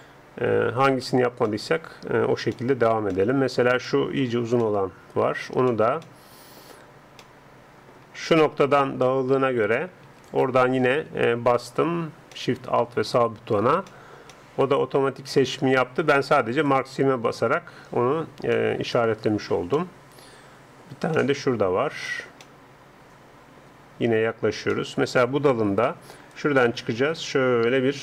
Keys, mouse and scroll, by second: 1.0-8.8 middle drag, 9.0-10.3 middle drag, 10.3-12.4 right drag, 12.4-16.0 middle drag, 16.6-18.6 drag, 18.6-26.4 middle drag, 25.9-28.0 d, 26.4-28.0 drag.